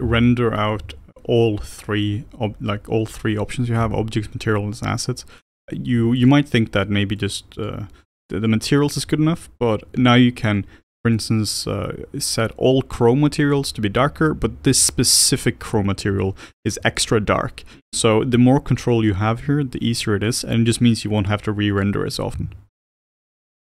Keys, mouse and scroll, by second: 6.2 click, 7.2 click, 7.5 click, 8.0 click, 8.9 scroll down 3, 9.1-10.5 middle drag, 10.5 click, 14.6 click, 16.4 ctrl+shift+click, 18.6-20.4 middle drag, 20.4 click, 21.7 click, 22.4 shift+d, 23.5 click.